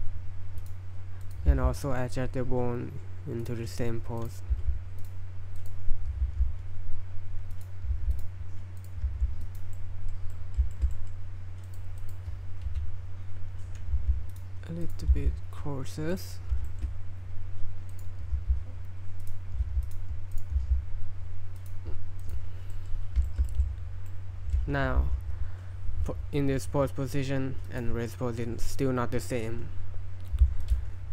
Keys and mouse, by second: 0.6 click, 1.5 r, 4.2 right click, 4.5 r, 5.6 right drag, 6.3 r, 7.9 r, 8.8 click, 9.1 r, 9.4 click, 9.7-10.1 middle drag, 10.3 middle drag, 10.7 shift+middle click, 10.9 middle click, 11.7 right click, 12.0 right click, 12.7 KP_1, 14.0 r, 14.8 right click, 15.1 r, 16.7 shift+middle drag, 17.9 right click, 18.3 r, 19.6 r, 20.4 right click, 20.6 r, 22.2 right click, 22.7 middle click, 23.3 shift+middle click, 23.6 middle click, 24.1-24.5 middle drag, 25.0 a, 27.7 click, 30.6 click.